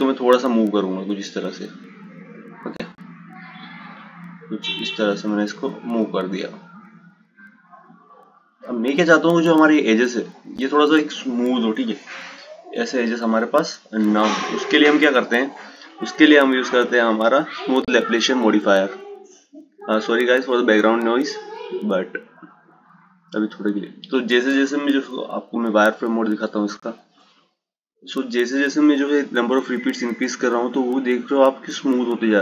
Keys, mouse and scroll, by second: 14.0 Tab, 17.8-19.0 drag, 22.0-25.1 drag, 27.4 click, 28.8-31.9 drag.